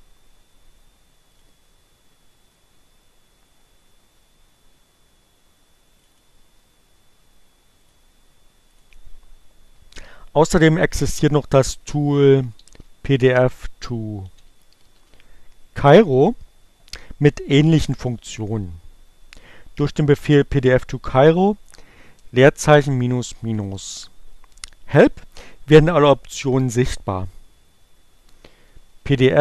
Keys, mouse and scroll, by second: 0.0 Return, 3.0 click, 10.9 click, 13.5 click, 14.6 click, 17.5-20.7 typing, 25.7 space, 25.8 -, 26.9-28.0 typing, 28.2 Return.